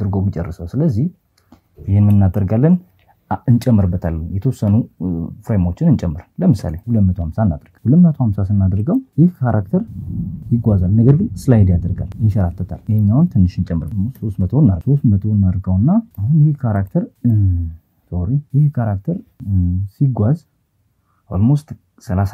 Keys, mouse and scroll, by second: 0.6-6.9 drag, 9.1 click, 10.7 click, 12.2-15.3 drag, 18.1 click, 19.0 click, 20.0 click, 21.3 click.